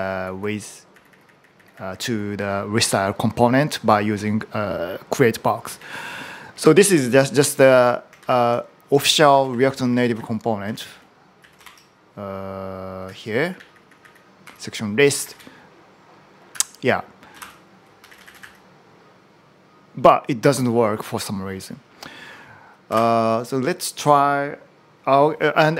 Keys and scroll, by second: 0.0-0.9 typing, 2.1-2.5 typing, 5.5 typing, 6.9 typing, 8.0 ctrl+u, 8.6-15.1 typing, 16.3 n, 17.5-18.7 typing, 22.4-23.2 typing.